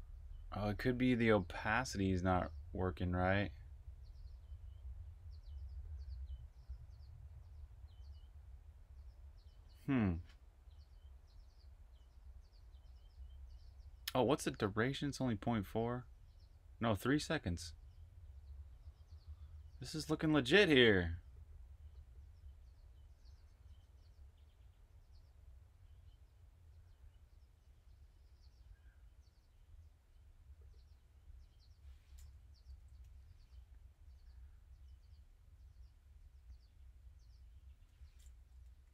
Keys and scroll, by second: 32.7 s, 38.3-38.9 typing.